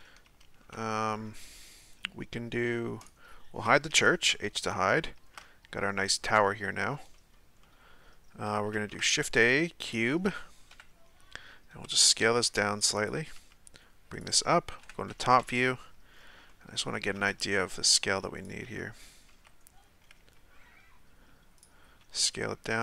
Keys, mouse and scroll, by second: 0.3 Tab, 3.1 right click, 3.9 h, 4.2-4.8 scroll down 1, 4.8-8.7 shift+middle drag, 8.7 shift+a, 10.7 KP_1, 11.9 s, 13.4 g, 14.8 KP_7, 15.4 KP_Decimal, 16.2-16.5 scroll down 2, 16.5-17.3 shift+middle drag, 17.3 g, 18.8 z, 19.4 z, 20.2 g, 21.8 s.